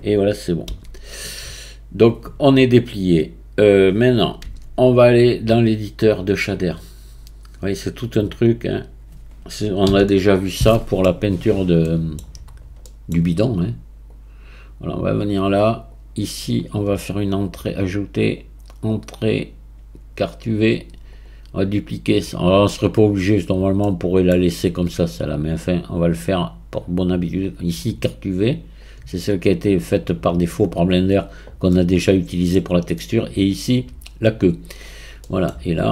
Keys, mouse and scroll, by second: 1.9 a, 4.5 Tab, 6.1-9.2 drag, 9.9 n, 10.1-11.4 middle drag, 11.4-11.8 scroll up 1, 11.8 middle click, 12.5-12.9 scroll down 3, 12.9-13.4 middle drag, 13.4 drag, 14.1 click, 15.9 click, 17.8-20.9 drag, 21.6-23.8 right drag, 23.8 middle click, 24.5-25.2 scroll up 3, 25.9-28.9 drag, 31.7-33.5 middle drag, 33.5-34.8 drag, 34.8-35.2 scroll down 1, 35.2-35.9 middle drag.